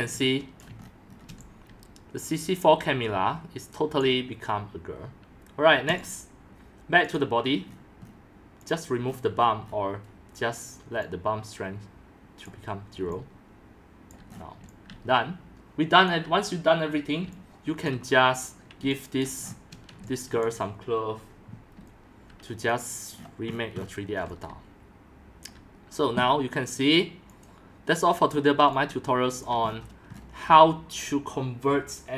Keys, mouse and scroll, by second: 0.0-0.2 typing, 0.2 shift+scroll, 0.6 click, 1.0 middle click, 1.1 shift+scroll, 1.3-4.0 typing, 1.5-3.9 middle drag, 4.1 click, 6.0 click, 7.4 drag, 7.7 scroll down 5, 7.9 middle click, 7.9 scroll, 8.0-8.7 scroll down 4, 9.0 click, 9.2-10.5 scroll down 9, 12.0 scroll, 12.3-14.1 drag, 13.1-17.8 typing, 14.6-14.9 scroll down 7, 14.9-16.3 middle drag, 17.9 click, 19.3 click, 19.7 shift+middle click, 20.0-20.4 typing, 20.5-21.7 drag, 21.7 c, 22.7 click, 23.2 middle click, 23.2 scroll, 23.5-24.1 scroll up 19, 24.0-26.0 typing, 24.1 scroll down 10, 25.4 click, 27.3-28.4 drag, 28.4-29.4 middle drag, 28.4-29.4 scroll down 5, 28.6-31.4 typing, 29.4 click, 30.2 middle click, 31.0 click.